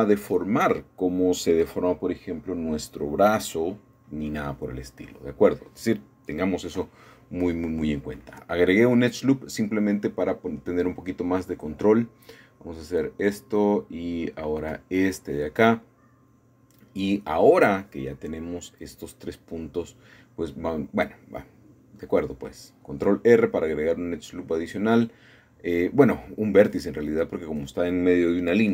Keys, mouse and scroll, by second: 1.5 m, 3.2 click, 3.5 middle click, 4.4 middle click, 6.4 a, 6.6 a, 7.1-8.3 scroll up 1, 8.3 shift+click, 10.0-11.0 scroll down 1, 12.0-12.4 scroll up 1, 13.2 shift+click, 13.8-14.8 shift+middle drag, 15.5 shift+click, 20.3 click, 21.0 click, 22.6 shift+click, 23.9 shift+click, 25.0-26.1 shift+middle drag, 26.1 shift+click, 26.9-28.0 scroll down 2, 27.4-28.7 shift+middle drag.